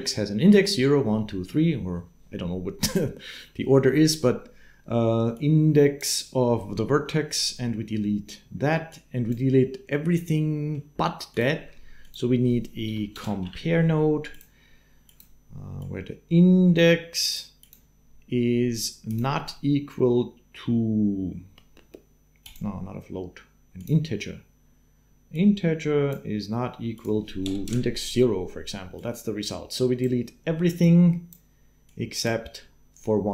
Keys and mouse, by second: 5.1 click, 8.7 click, 10.1 middle click, 11.1 click, 11.3 shift+a, 15.6 click, 25.9 click, 26.8-27.8 drag, 28.8-30.0 drag, 30.6 click.